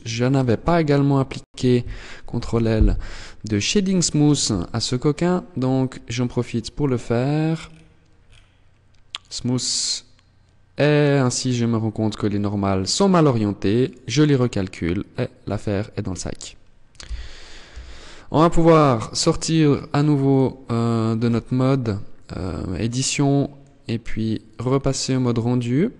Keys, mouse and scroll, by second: 1.8 ctrl+l, 3.7 t, 4.5-5.6 scroll up 9, 6.8-7.2 scroll down 6, 7.6-8.4 scroll down 4, 8.4 click, 10.5 middle click, 13.0 click, 16.2 z, 16.9 z, 17.8-18.2 scroll down 2, 18.9 click, 20.5 Tab, 21.2 middle click, 21.5-22.2 scroll down 7, 22.4 middle click, 23.7 click.